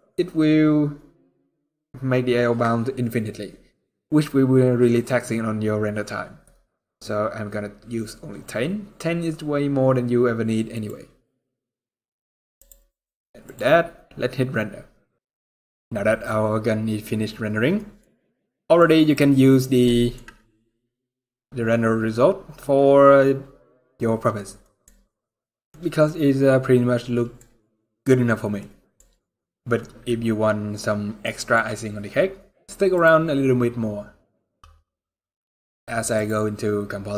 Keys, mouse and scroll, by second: 10.5 click, 12.3 click, 13.2 click, 13.8-14.8 scroll down 1, 14.8-15.1 scroll up 1.